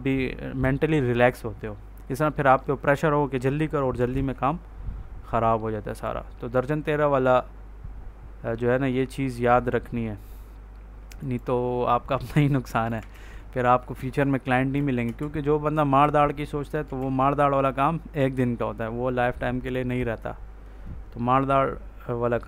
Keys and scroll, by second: 4.0 ctrl+s, 12.2 ctrl+s, 14.9 space, 15.9 ctrl+s.